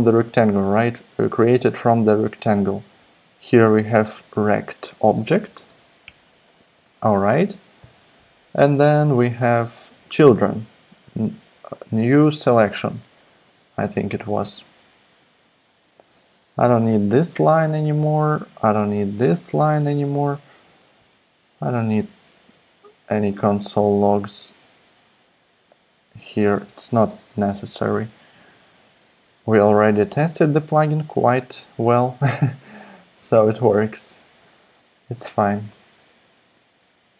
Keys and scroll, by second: 4.8-6.1 typing, 6.5 super+Right, 7.4 Left, 7.8 ,, 7.9 space, 9.0 BackSpace, 9.7 space, 10.8-11.6 typing, 12.4 Tab, 16.2 Up, 16.3 Down, 16.6 Down, 17.0 super+Right, 17.3 super+BackSpace, 17.8 BackSpace, 19.4 super+BackSpace, 26.7 super+BackSpace.